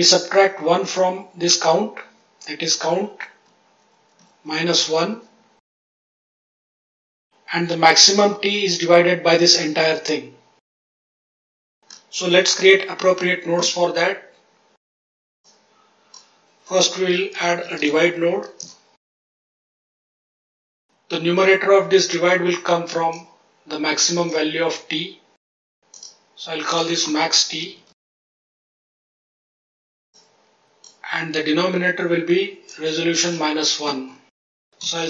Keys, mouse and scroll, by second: 2.1 click, 2.6 click, 3.4 click, 3.8 click, 4.1 click, 4.4 click, 4.7 click, 5.0 click, 6.2-6.7 drag, 7.5 click, 8.0 click, 13.3-13.8 ctrl+z, 15.4-18.6 drag, 19.2 click, 19.6 click, 19.9 click, 23.0 click, 25.9 click, 26.6-28.3 drag, 30.1 click, 32.6-35.0 drag.